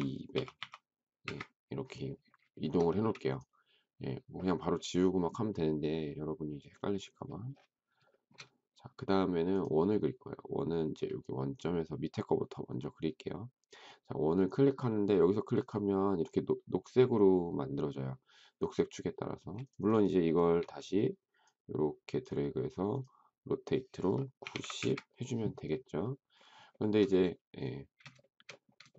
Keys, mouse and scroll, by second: 0.0-0.3 typing, 1.2 Return, 2.5 shift+middle click, 2.6 shift+double middle click, 2.9 space, 8.1 shift+middle click, 19.3 space, 20.5 q, 24.0-24.9 typing, 26.7 shift+middle click, 27.9 space, 28.2 shift+middle click, 28.9 shift+middle click.